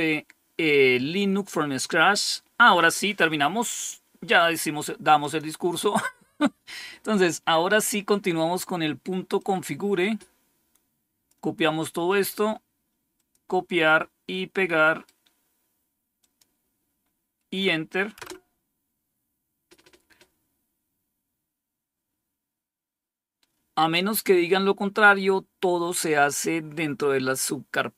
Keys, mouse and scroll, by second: 5.1 click, 6.5-6.8 scroll down 2, 9.3-11.2 drag, 12.0 right click, 13.1 click, 14.7 right click, 16.1 click, 18.1 Return.